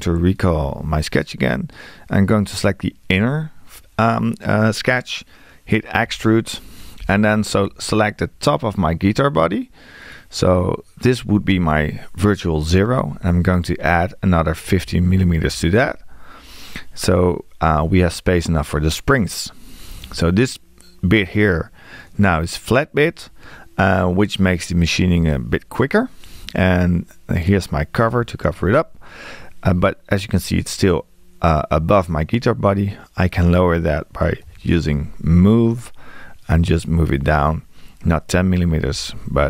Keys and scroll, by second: 6.1 e, 13.1 Left, 14.7 1, 34.5 m, 38.5 Left.